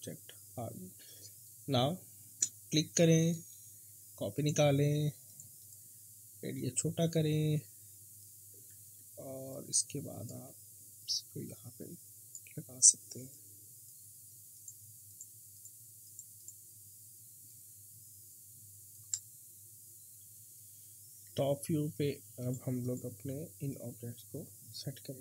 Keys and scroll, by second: 8.8 e, 10.4 w, 21.2 t.